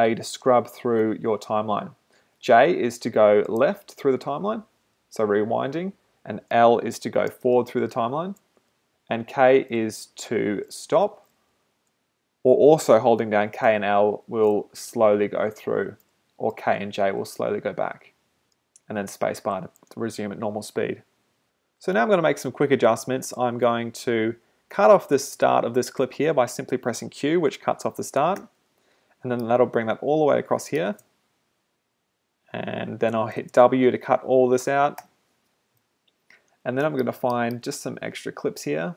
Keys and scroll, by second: 0.2 j, 2.0-3.0 typing, 4.6-8.6 typing, 9.8 l, 10.3 k, 11.2 l, 11.6 k, 13.7 l, 16.6 j, 19.0 space, 28.4 q, 31.0 space, 33.4 space, 35.0 w.